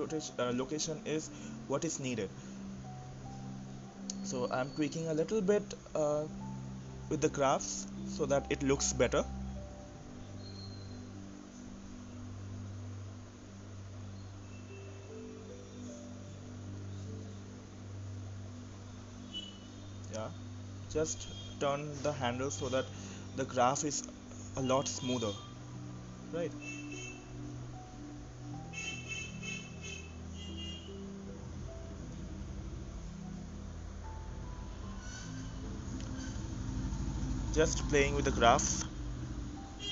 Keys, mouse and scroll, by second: 0.1 click, 0.3 Delete, 0.7 click, 0.9 Delete, 1.2 click, 1.4 Delete, 1.7 click, 1.9 Delete, 2.2 click, 2.5 Delete, 3.0 click, 3.3 Delete, 3.6 click, 3.9 Delete, 4.9 click, 5.5 click, 5.9 click, 7.4 click, 8.4 click, 12.2 click, 13.3 click, 15.3 click, 18.9-19.6 scroll up 5, 19.6-20.2 middle drag, 20.6-20.9 scroll up 6, 20.9-22.4 middle drag, 22.4-23.7 drag, 24.8 click, 28.7 click, 30.1-31.4 scroll down 12, 31.4-33.5 scroll down 4, 33.5-34.2 scroll down 3, 36.7 click, 39.0 g.